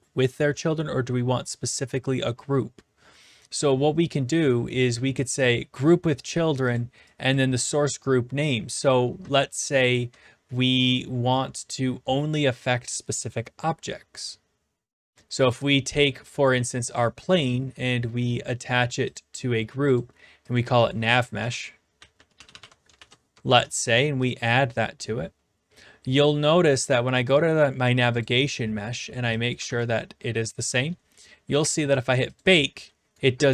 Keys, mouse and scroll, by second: 5.9 click, 6.7 click, 7.3 click, 15.5 click, 19.2 click, 19.9 click, 20.6 click, 21.2-23.1 typing, 23.5 ctrl+c, 24.3 click, 26.8 click, 28.2 click, 29.5 click, 29.7 ctrl+v, 32.4 click, 33.0-33.5 typing.